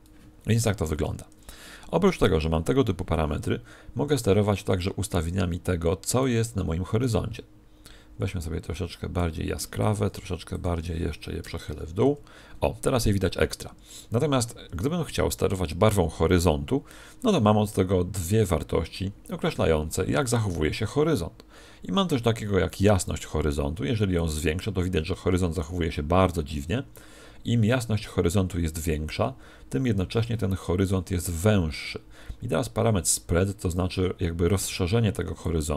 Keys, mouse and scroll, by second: 0.9 Escape, 2.1 right click, 5.0 click, 7.0 click, 10.5 click, 14.6 Escape, 22.1 click, 24.1 click, 35.3 click.